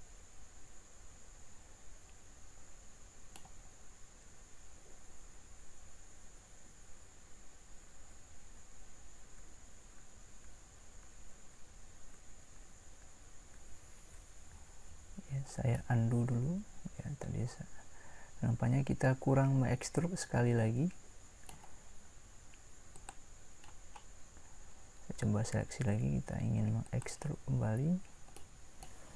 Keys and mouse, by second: 9.4 ctrl+z, 10.0 ctrl+z, 10.4 ctrl+z, 11.0 ctrl+z, 12.2 ctrl+z, 12.6 ctrl+z, 13.1 ctrl+z, 13.6 ctrl+z, 15.7-17.0 middle drag.